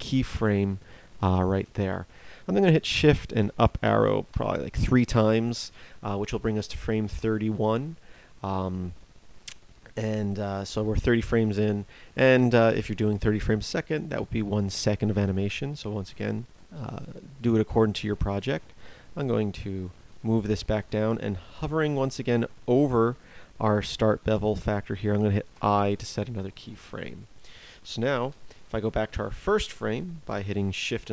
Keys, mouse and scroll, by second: 3.4 shift+Up, 25.5 i, 28.2 shift+Left.